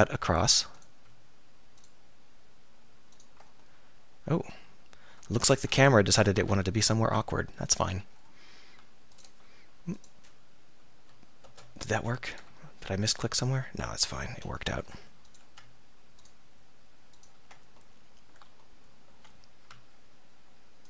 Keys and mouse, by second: 6.0 middle click, 10.0-12.0 middle drag, 12.2 middle click, 12.5 middle click, 12.7 middle click, 14.3 k, 20.6-20.8 middle drag.